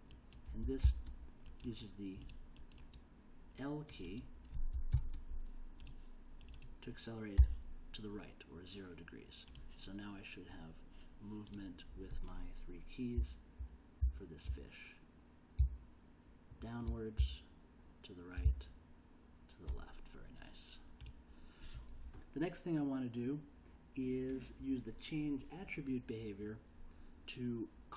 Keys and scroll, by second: 0.8 shift+l, 4.9 shift+l, 7.4 0, 13.1 l, 14.0 j, 15.6 k, 17.2 l, 18.4 j.